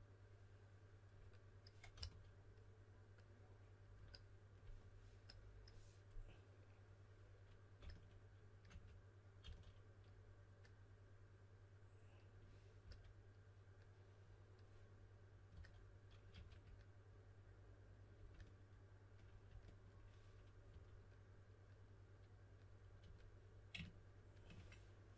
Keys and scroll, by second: 1.9 s, 7.8-9.4 typing, 12.8 typing, 15.5-16.3 typing, 20.6 typing, 23.0 typing.